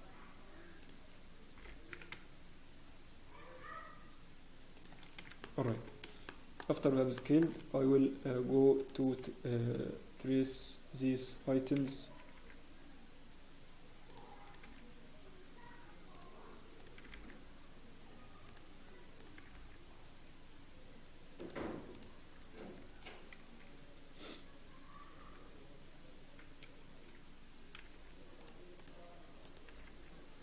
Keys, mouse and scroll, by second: 2.1 shift+g, 5.4 shift+middle click, 5.7 scroll up 1, 6.2 shift+middle click, 7.1 shift+middle click, 7.4 shift+scroll, 8.8 click, 8.8-10.2 scroll up 1, 10.2 g, 14.6 click, 14.6 g, 16.7 click, 16.9 g, 19.3 g, 21.9 click, 22.3 g, 28.8 click, 28.8 g, 29.6 g.